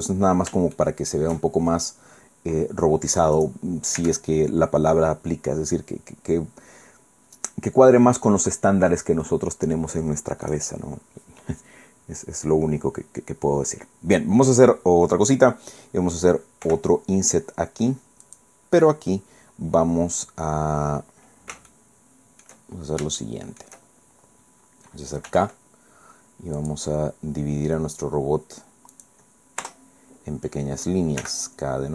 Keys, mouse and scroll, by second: 0.1 scroll up 1, 0.7 shift+middle click, 1.6 shift+scroll down 2, 2.3-2.7 scroll down 2, 3.3 click, 4.0 Tab, 10.5 click, 16.7 i, 18.3 click, 20.9 middle click, 21.7 shift+click, 23.2 shift+click, 25.3 k, 26.6 click, 28.9 click, 29.6 Return, 31.2 k.